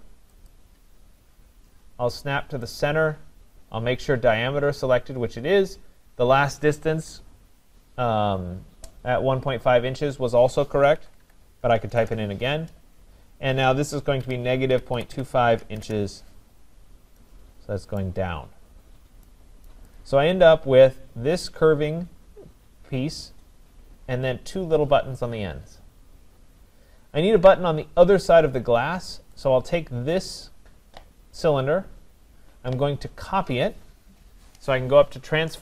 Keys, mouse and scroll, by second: 0.5 click, 2.7 click, 10.7-12.3 typing, 14.0-15.6 typing, 15.8 Return, 16.8 scroll, 18.0 right click, 18.2-19.3 scroll, 19.7 right click, 20.0 click, 20.5 scroll, 23.0 scroll down 6, 27.0 scroll up 1, 27.1-29.3 scroll, 29.5 click, 31.4-32.2 scroll, 31.6 middle click.